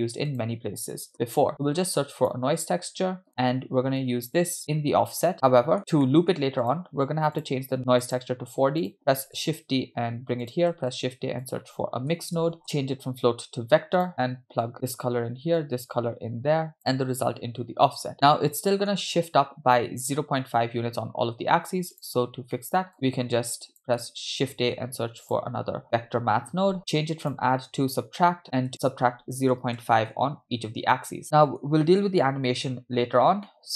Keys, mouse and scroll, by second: 4.1-4.7 drag, 5.4 middle click, 5.4-6.0 scroll down 4, 6.0 middle click, 6.7 click, 7.4 click, 8.8 click, 9.4 shift+d, 10.7 shift+a, 12.7-14.1 drag, 14.7 click, 15.6-18.1 drag, 18.3 middle click, 20.5-21.2 scroll down 1, 21.2-21.9 scroll down 1, 21.9-22.5 scroll down 3, 21.9 click, 22.5 middle click, 22.9 click, 23.5 click, 24.8 shift+a, 26.8-27.2 scroll up 2, 27.3-28.4 drag, 28.4 middle click, 28.7-30.1 shift+drag, 31.2 middle click, 33.4 scroll down 2, 33.5 middle click.